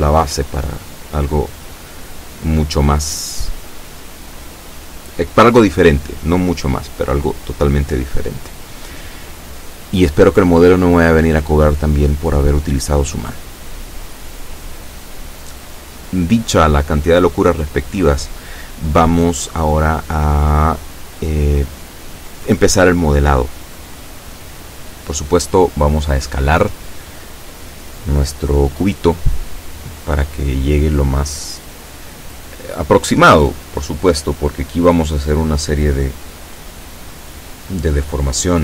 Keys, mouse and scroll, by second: 24.3 s, 25.1 x, 31.0-32.3 drag, 35.5 Tab.